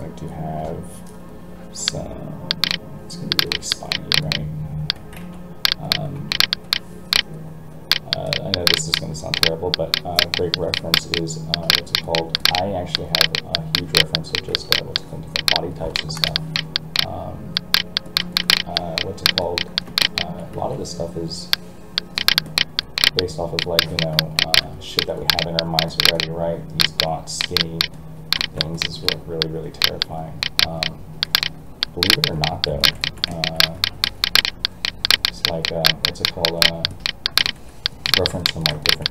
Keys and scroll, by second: 5.2 alt+a, 20.5 alt+a.